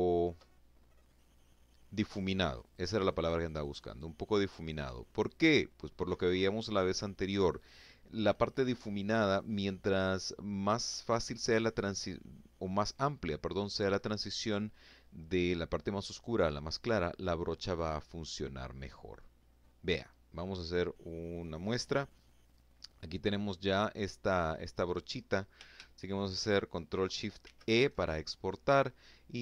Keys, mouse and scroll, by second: 0.5-3.4 drag, 25.8 ctrl+shift+e, 28.5 click.